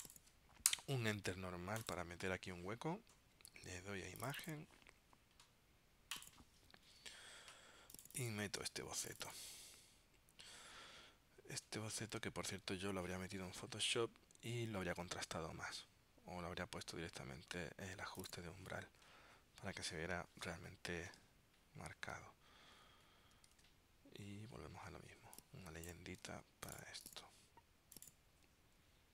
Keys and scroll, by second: 21.3 super+Tab, 23.7 super+Tab, 26.4 super+x.